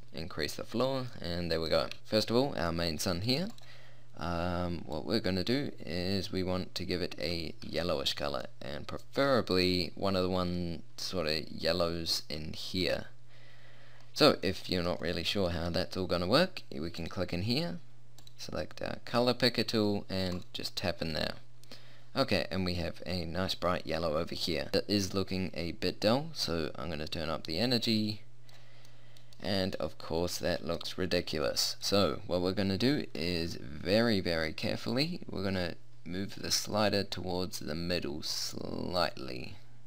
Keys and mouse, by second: 1.3 middle click, 9.0 middle click, 9.2-14.4 middle drag, 14.6 middle click, 17.0-18.8 middle drag, 21.8-25.4 middle drag, 26.4-28.2 drag, 28.8 middle click.